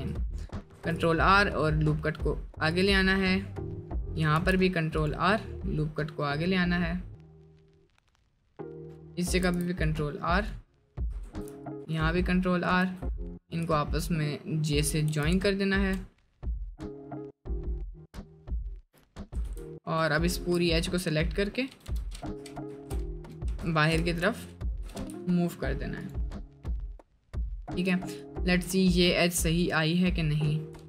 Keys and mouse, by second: 0.7 ctrl+r, 3.0 middle click, 3.8 middle click, 4.3 ctrl+r, 7.5-8.9 middle drag, 9.3 ctrl+r, 10.5 middle click, 12.1 middle click, 12.8 1, 15.3 j, 15.5 shift+middle click, 16.2 middle click, 19.6 j, 21.1 middle click, 21.7 h, 21.9 h, 22.7 z, 23.9 ctrl+z, 24.4 middle click, 24.8 g, 26.3 middle click, 27.9 2, 30.2 middle click.